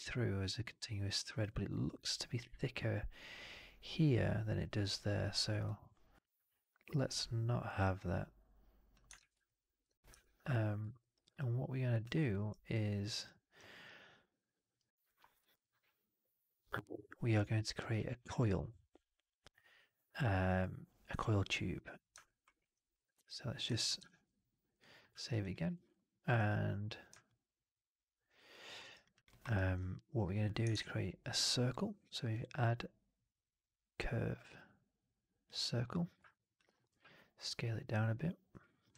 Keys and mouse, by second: 5.5-8.8 drag, 9.0 shift+x, 9.3 alt+middle click, 10.0 4, 11.0 alt+right drag, 11.2 alt+click, 12.1 middle click, 12.2 right click, 12.6 click, 13.0 alt+right click, 17.8 click, 22.1 alt+middle drag, 22.4 alt+right drag, 22.9 click, 23.8 ctrl+s, 25.1 alt+right drag, 25.3 alt+click, 25.6 alt+right drag, 25.8-26.1 alt+drag, 27.1-28.4 alt+drag, 28.5 alt+middle drag, 28.7 alt+right drag, 28.9 alt+drag, 29.2 alt+middle drag, 29.3 alt+right drag, 30.6 shift+Tab, 33.1-35.4 drag, 36.2 alt+click, 38.4 middle click, 38.8 w.